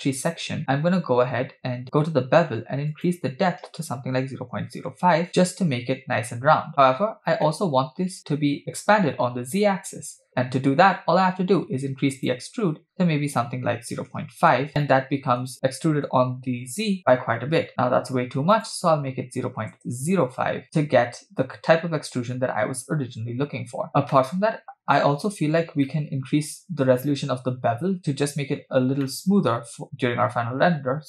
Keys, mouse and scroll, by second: 0.3 click, 0.6-2.1 scroll down 1, 2.9-5.2 drag, 6.7-7.4 scroll up 5, 7.5-8.2 middle drag, 12.2-14.4 drag, 14.7 scroll down 2, 14.9-15.5 middle drag, 17.7-19.8 drag, 20.6-22.8 middle drag, 20.6 scroll up 2, 23.9 scroll down 3, 24.2-25.0 middle drag, 25.1-25.4 scroll up 3, 25.9-26.5 shift+middle drag, 28.0-28.6 scroll up 1, 28.6 scroll up 1, 29.1 middle click.